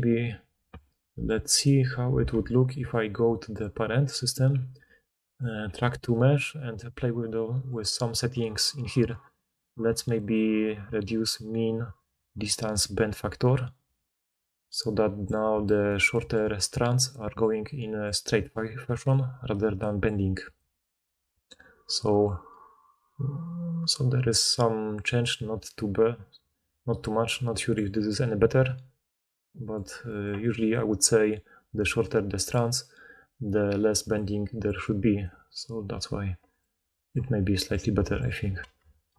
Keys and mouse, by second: 1.5 click, 2.3 alt+a, 2.5-12.8 middle drag, 12.8-19.0 drag, 16.7-20.6 typing, 18.4 middle click, 18.4 right click, 31.8-35.4 typing, 38.8 ctrl+z.